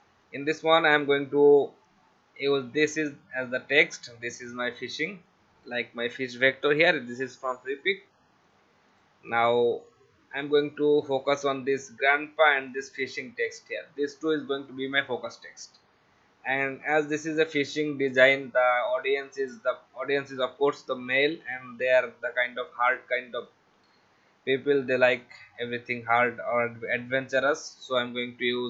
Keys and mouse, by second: 2.9 click, 4.7 click, 6.4 click, 8.9 click, 12.7 click, 14.3 click, 15.4 click, 18.0 click, 19.3 click, 21.1 click, 23.4 click, 25.2 click.